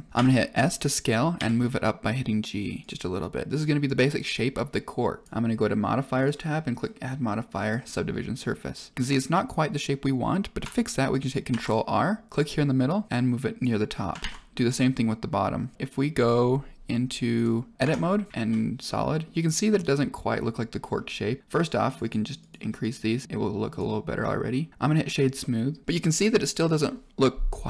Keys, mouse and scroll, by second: 0.1 KP_1, 0.1 s, 1.3 g, 5.2 click, 6.1-7.6 drag, 11.4 ctrl+r, 14.1 ctrl+r, 17.7 Tab, 18.3 z, 18.8-19.2 middle drag, 19.7-20.4 middle drag, 20.7 middle click, 21.8 click, 21.9 click, 22.3 click, 22.7 click, 23.0 click, 23.6 right click, 25.3-25.8 middle drag, 26.6 middle click.